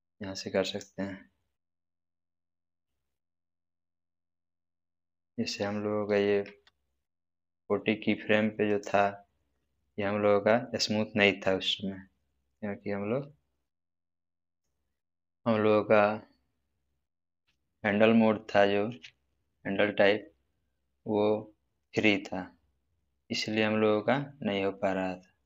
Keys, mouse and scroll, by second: 1.7-3.1 scroll down 1, 6.4 space, 7.1 click, 14.4 right click, 21.8 click.